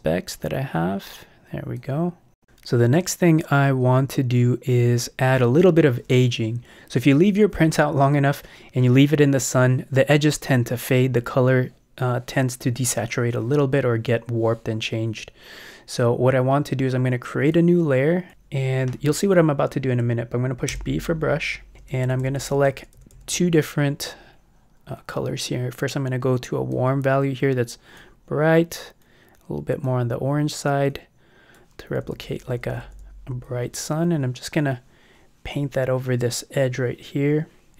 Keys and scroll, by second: 18.3 Return, 21.7 ], 31.9 ].